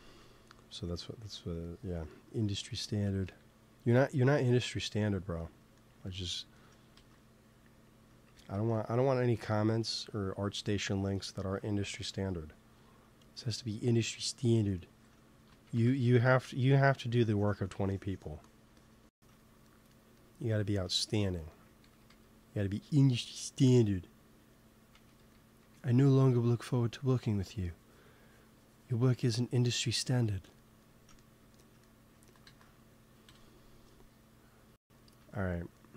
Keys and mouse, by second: 0.1 ctrl+s, 3.1 KP_1, 6.8 ctrl+s, 8.2-10.2 drag, 8.6 ctrl+s, 12.0 KP_3, 15.6 shift+c, 16.1 f, 16.2-20.8 drag, 18.9 f, 21.8 g, 22.0 f, 22.8-25.1 drag, 24.9 shift+c, 25.1 f, 25.5 f, 26.3 f, 28.3-31.1 drag, 32.1-33.4 drag, 32.4 ctrl+s, 33.4 KP_1, 35.3 middle click.